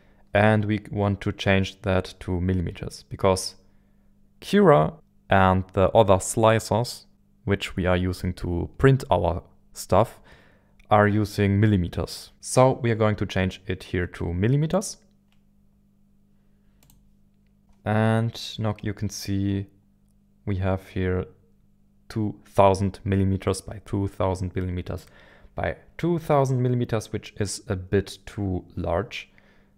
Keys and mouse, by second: 14.7-16.9 drag.